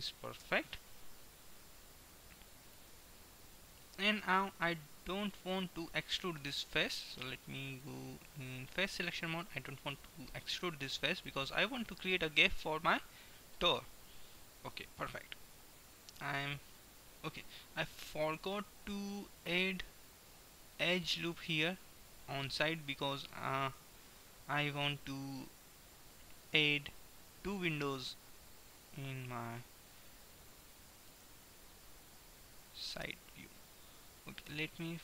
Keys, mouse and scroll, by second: 2.0 click, 7.8-9.7 drag, 9.7-15.7 middle drag, 15.7 KP_1, 17.0 middle click, 19.8-22.8 middle drag, 24.0 a, 24.2 a, 25.8 s, 30.7 middle click, 31.7 ctrl+z, 33.0 a.